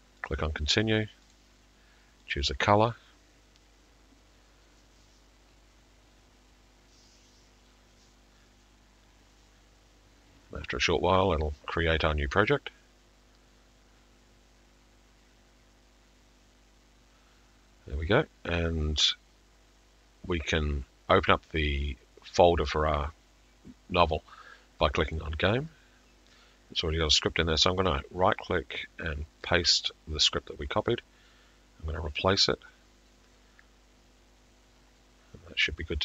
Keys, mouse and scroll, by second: 0.3 click, 1.4 click, 2.3 click, 25.2 click, 27.2 click, 27.9 click, 29.5 middle click, 32.4 click.